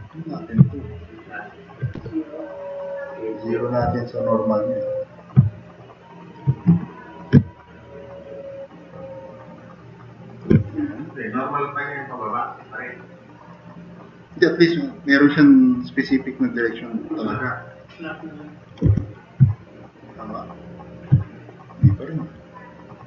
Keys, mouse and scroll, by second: 2.0 w, 17.6 click, 18.9 4.